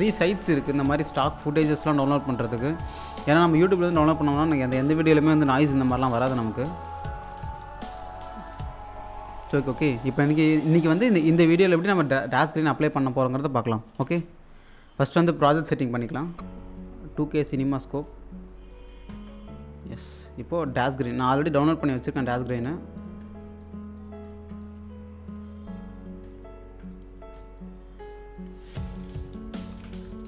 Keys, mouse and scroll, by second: 1.0-2.0 scroll down 1, 2.1 alt+click, 2.6-2.9 scroll up 1, 2.9 click, 3.8 space, 4.5-6.8 drag, 7.1 click, 8.5-8.8 scroll up 1, 8.8 click, 9.3-9.7 scroll down 1, 14.0 space, 15.0 click, 15.4 s, 15.8 scroll down 1, 16.8 click, 19.1-20.4 typing, 20.2 click, 22.6 typing, 23.0-29.7 drag, 23.6-24.4 typing, 29.8 space.